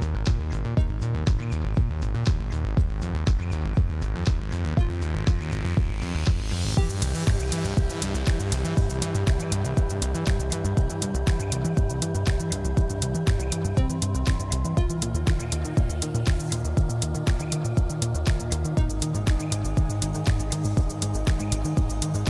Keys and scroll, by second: 1.3 6, 1.6 0, 1.9 e, 2.0 Return, 3.2-6.4 typing, 8.9 c, 8.9 h, 9.2 e, 9.3 i, 9.5 Return, 10.4 5, 10.5 Return, 12.2 Tab, 12.6 Tab, 12.9 2, 13.3 ctrl+b, 13.4 ., 13.4 0, 13.6 Return, 14.0 3, 15.8-16.9 typing, 16.4 Return, 17.1 ctrl+v, 20.4 6, 20.8 c, 21.0 9, 21.2 8, 21.4 Return.